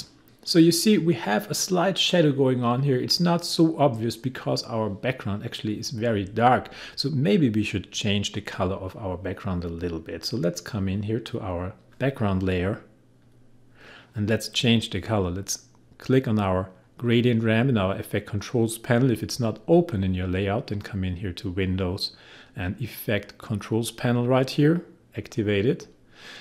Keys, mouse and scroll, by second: 10.8-13.2 drag.